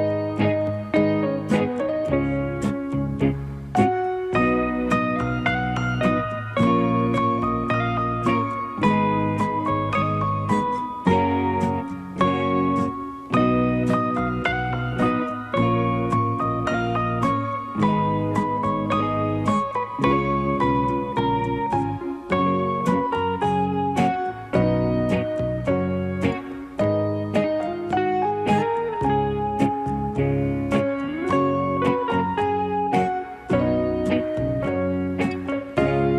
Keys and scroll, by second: 15.7 alt+space.